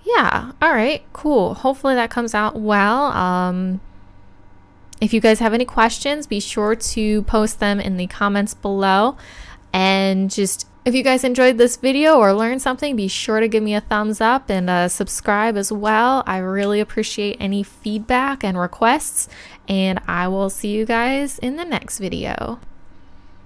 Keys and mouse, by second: 21.0-22.6 middle drag, 22.6 KP_1, 22.6 KP_7.